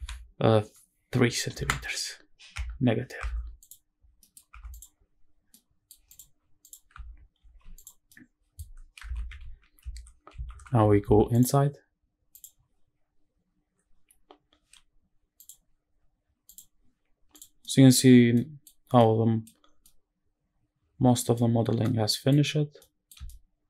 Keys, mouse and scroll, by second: 1.3 KP_3, 2.2 KP_Subtract, 2.9 Tab, 3.3 click, 3.8 scroll down 2, 3.9 middle click, 4.4 click, 4.8-5.3 scroll up 2, 5.3 middle click, 5.8 click, 6.3 click, 7.1 alt+h, 7.5 click, 7.8-8.3 middle drag, 8.4 scroll up 2, 8.8 shift+`, 12.7 click, 16.3 click, 17.0 click, 17.2 scroll down 1, 17.3-17.7 middle drag, 17.7-18.0 scroll up 1, 18.0 middle click, 18.5 scroll up 1, 18.5 scroll down 1, 18.7-19.1 middle drag, 19.3 scroll down 1, 19.5-21.0 middle drag, 21.2-21.5 scroll up 1, 21.5-22.0 middle drag, 22.2-22.5 scroll up 1, 22.5 middle drag, 23.0-23.6 shift+middle drag.